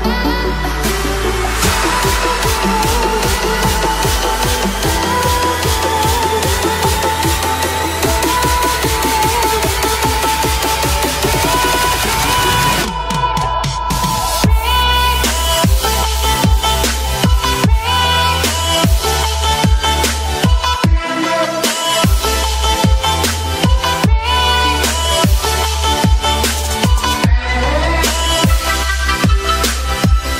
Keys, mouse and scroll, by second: 2.6 click, 6.1 Return, 7.5-8.6 typing, 9.5 click, 11.0-11.3 typing, 12.1 click, 17.8 ctrl+z, 18.3 space, 18.7 ctrl+click, 19.3 ctrl+click, 20.7-22.3 typing, 22.6 click, 23.9 ctrl+z, 25.7 click, 28.0 click.